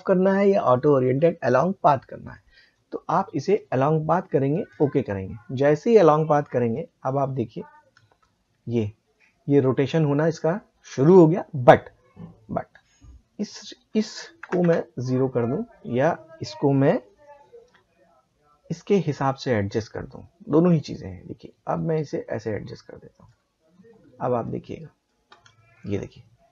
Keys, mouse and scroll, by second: 3.5 click, 7.7 space, 10.9 space, 13.4 click, 18.9-24.4 drag, 25.3 space.